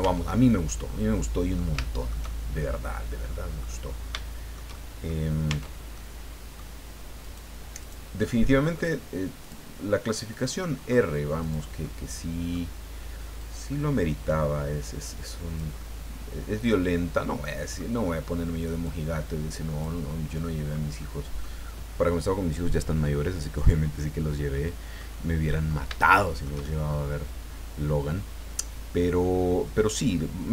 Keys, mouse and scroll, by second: 0.0 Tab, 0.9 middle click, 2.7-3.8 middle drag, 4.1-5.2 shift+middle drag, 5.5 shift+Tab, 5.9 middle click, 7.2 right click, 7.5 middle click, 7.8 right click, 8.1-9.4 middle drag, 9.4 click, 10.3 right click, 10.6 middle click, 11.4 right click, 11.8 middle click, 13.4-15.8 drag, 15.8-18.0 middle drag, 18.8 click, 20.0 middle click, 21.0 middle click, 24.6 middle click, 25.2 middle click, 26.0-27.1 shift+middle drag.